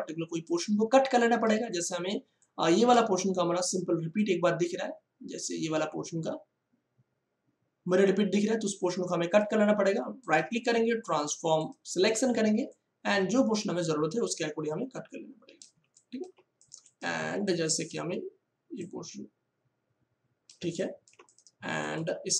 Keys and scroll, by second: 1.5 space, 12.2 space, 15.7 space, 20.5 space.